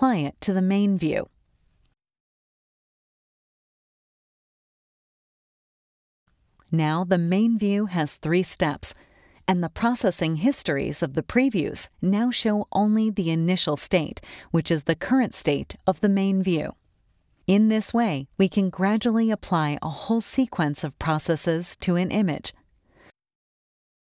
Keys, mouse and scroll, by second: 5.9 right click, 7.2 click, 8.8 click, 9.5 click, 10.3 click, 12.6 click, 12.9 right click, 14.7 click, 18.7 click, 19.9 click, 21.0-24.0 drag.